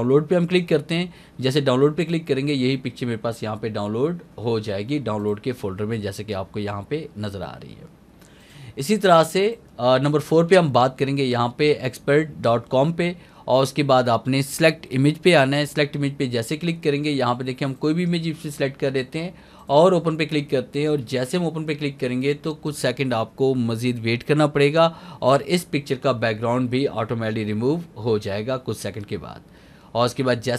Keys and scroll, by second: 1.4 alt+a.